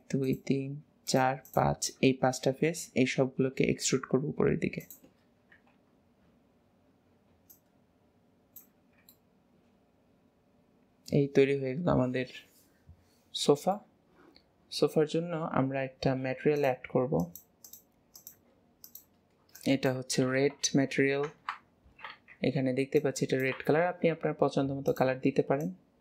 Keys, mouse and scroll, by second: 0.3 shift+click, 1.1 shift+click, 1.5 shift+click, 1.9-3.0 middle drag, 3.0-3.6 scroll up 2, 3.6 e, 5.6 KP_3, 7.6 click, 9.2-10.2 middle drag, 11.1-12.3 middle drag, 14.9 scroll up 2, 16.7 click, 17.7-21.7 drag.